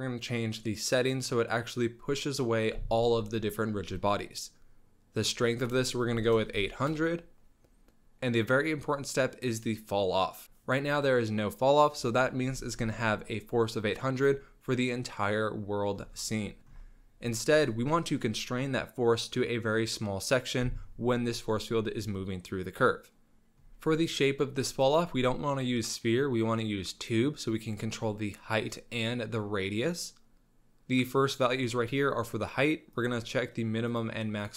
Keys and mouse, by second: 3.8 middle click, 4.0-4.6 middle drag, 5.2 click, 6.5 KP_0, 24.9-27.4 drag, 33.2 click, 34.2-34.5 drag.